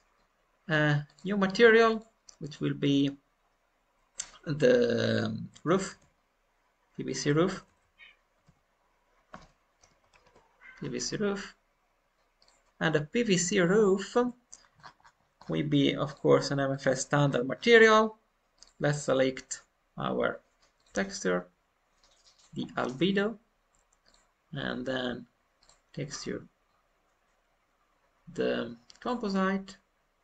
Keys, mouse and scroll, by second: 0.0 middle click, 1.0-12.7 drag, 7.4 Left, 7.6 Left, 13.3-14.5 middle drag, 14.5 scroll down 2, 15.3-16.0 scroll down 5, 16.0-17.1 drag, 17.1-17.4 scroll down 2, 18.5-30.2 drag.